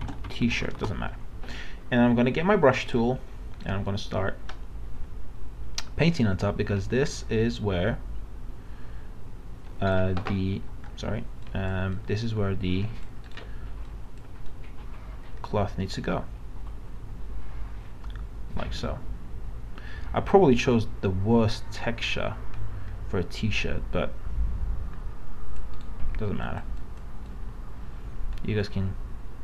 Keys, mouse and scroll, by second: 0.0-1.2 typing, 2.8 typing, 2.9-10.5 drag, 10.5 ctrl+z, 11.4 click, 13.3 right click, 13.8-25.8 drag, 25.8 right click, 26.4-29.4 drag.